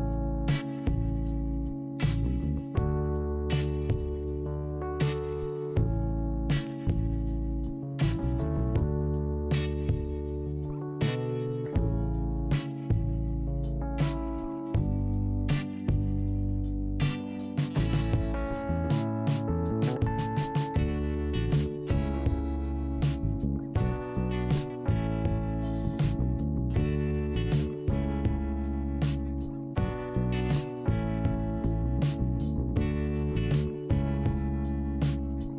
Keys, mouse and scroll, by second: 0.1 click, 4.0 click, 5.4 click, 6.5 click, 9.2 scroll down 1, 10.1 click, 11.0 click, 13.0 scroll up 1, 13.8 click, 14.0 scroll up 1, 14.1 click, 15.0 scroll up 1, 18.0 click, 20.1 click, 20.9 scroll down 2, 21.9 p, 23.1 click, 28.5 scroll down 2, 29.2 scroll up 1, 30.5 click, 34.4 scroll up 1.